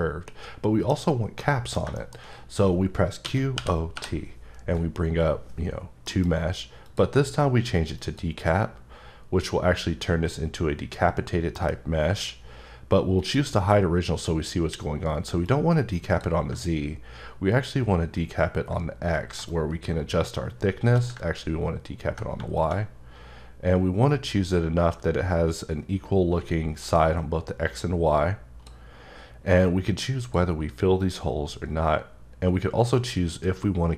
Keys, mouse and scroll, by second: 0.0 scroll up 2, 0.3 middle click, 1.4 middle click, 2.1-2.9 shift+scroll up 3, 3.3-4.0 typing, 6.1 F9, 6.9 click, 8.0 click, 11.6 F9, 13.2 click, 15.5 click, 17.4 ctrl+scroll down 1, 18.9 scroll down 1, 19.5 shift+click, 21.7-22.2 ctrl+scroll down 1, 22.6 click, 30.2 click, 31.0 click, 32.9 click.